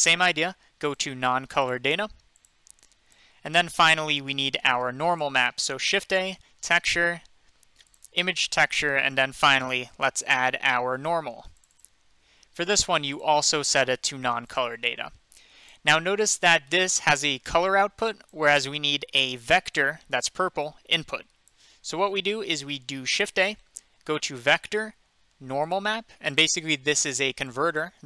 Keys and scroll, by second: 5.7 a, 23.3 a.